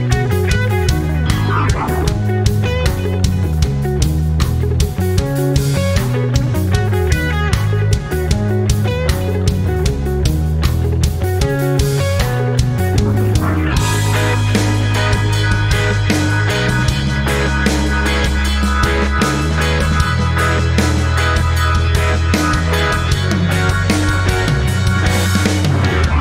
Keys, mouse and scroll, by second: 14.7 ctrl+scroll up 1, 16.3-26.2 drag.